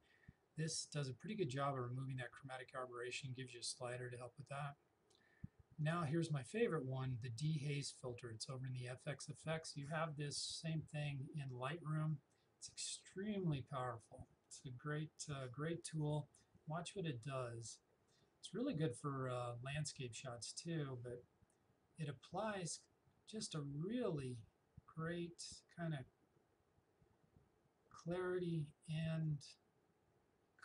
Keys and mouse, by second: 5.9 click, 19.9-30.6 drag.